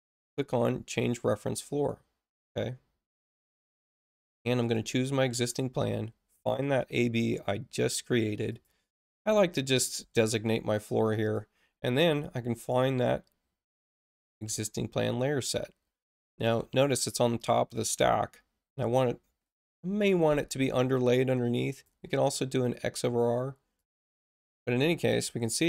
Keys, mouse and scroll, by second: 0.0 click, 3.7 click, 4.6 click, 6.6 click, 6.8 click, 8.5 click, 9.5 click, 11.2 click, 13.8 click, 21.7 click, 23.7 click.